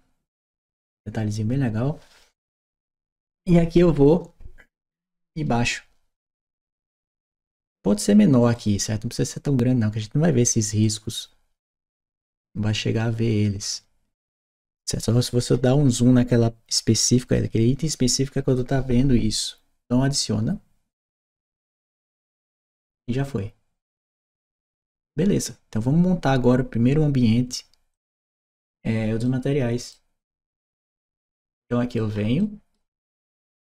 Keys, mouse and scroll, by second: 8.3 click, 10.6 click, 21.1 click, 27.7 click, 29.0 right click, 30.0-30.6 scroll up 1, 30.6-31.7 right drag, 31.9 scroll up 1, 32.2 right click, 33.4 click.